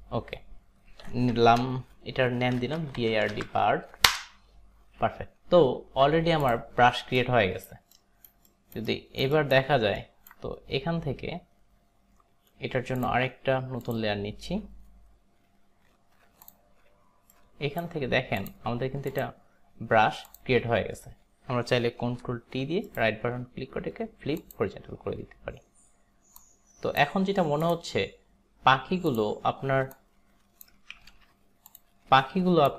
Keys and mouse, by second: 2.6-3.9 typing, 4.4 Return, 6.4 click, 7.4 alt+right click, 7.4 click, 8.0 alt+right click, 8.5 alt+right click, 9.5 alt+right click, 10.1 alt+right click, 13.0 click, 13.9 click, 17.4 alt+right click, 19.2 click, 20.4 click, 22.1 ctrl+t, 22.9 right click, 24.4 click, 26.5 click, 27.7 click, 29.2 click, 30.0 click, 31.2 ctrl+z, 31.8 click.